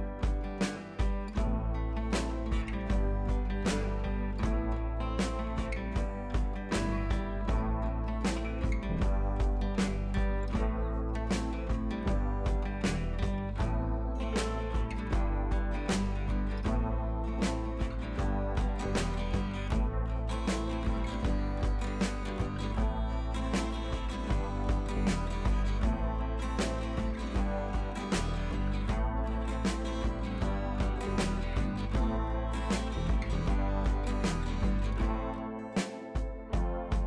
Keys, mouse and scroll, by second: 1.3 ctrl+z, 2.1-3.0 drag, 8.3 scroll up 1, 8.7-9.2 click, 9.4 ctrl+t, 10.0-11.3 drag, 12.3 scroll down 1, 13.3-13.6 scroll up 1, 14.0-21.8 drag, 23.4 shift+click, 24.4 ctrl+z, 24.8 click, 26.4 ctrl+z, 27.5-32.4 drag.